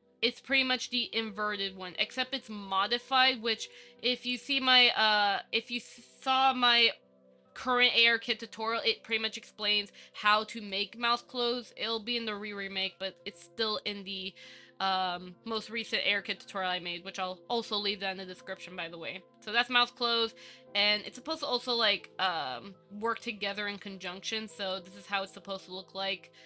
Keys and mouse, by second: 0.8-3.9 drag, 4.5 click, 5.9 click, 8.6 click, 10.2 click, 13.8 click, 21.2 click, 22.0 click, 23.3-24.3 drag, 24.9-25.5 middle drag, 25.7-26.4 middle drag.